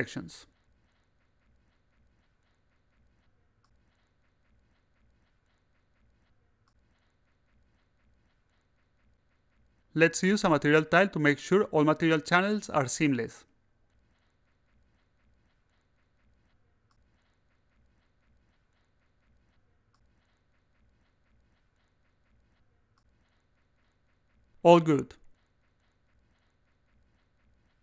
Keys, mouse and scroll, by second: 2.9 click, 3.8 click, 6.0 click, 6.4 click, 6.9 click, 7.3 click, 7.9 click, 8.7 click, 9.8-12.7 drag, 13.7 click, 13.8-16.0 typing, 16.4-16.8 drag, 17.0-17.5 drag, 17.8 click, 18.9 click, 19.4 click, 20.4 click, 21.3 click, 22.3 click, 23.0 click, 23.9 click, 25.1 click.